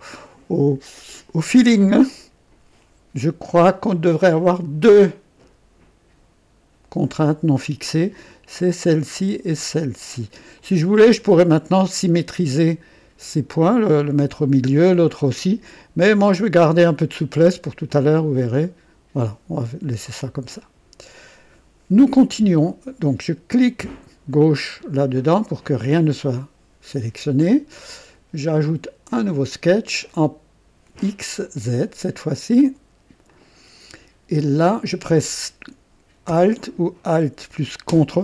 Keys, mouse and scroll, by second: 8.9 click, 10.6 click, 17.9-19.4 drag, 20.6 click, 24.4 click, 29.1 click, 31.4 click, 33.3 click.